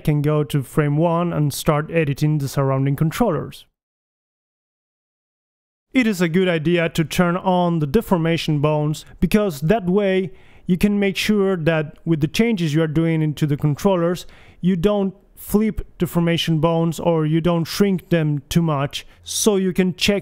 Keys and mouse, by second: 2.1 middle click, 3.2 middle click, 3.5 right click, 3.6 g, 4.2 right click, 4.5 g, 5.3 click, 5.4 g, 5.6 right click, 5.8 g, 6.7 click, 7.4 g, 8.2 click, 8.8 g, 9.8 g, 10.1 click, 10.6 g, 11.0 click, 12.1 g, 13.3 click, 13.6 g, 14.4 click, 14.7 g, 15.3 click, 15.8 g, 17.3 g, 17.8 click.